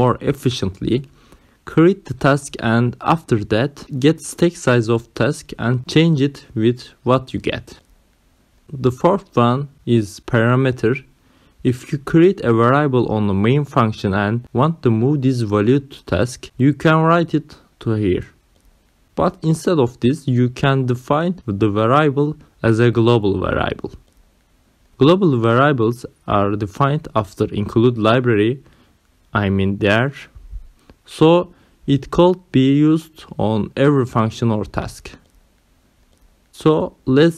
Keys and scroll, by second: 11.5 ,, 12.1 space.